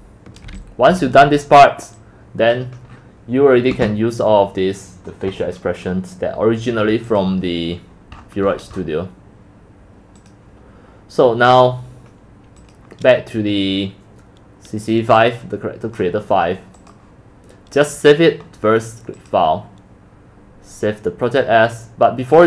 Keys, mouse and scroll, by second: 0.1-1.5 typing, 1.2-3.0 drag, 3.0-4.0 scroll up 8, 4.0 scroll down 8, 5.6 scroll up 3, 5.8 middle click, 5.8-6.1 scroll, 6.3 middle click, 7.1 scroll down 6, 7.2 click, 8.2 middle click, 8.2 scroll, 8.2 scroll, 8.3 scroll, 8.6 middle click, 8.6 scroll, 8.8 middle click, 8.8 scroll, 8.9 scroll, 9.7-10.3 middle drag, 10.3-18.9 drag, 22.0-22.4 drag.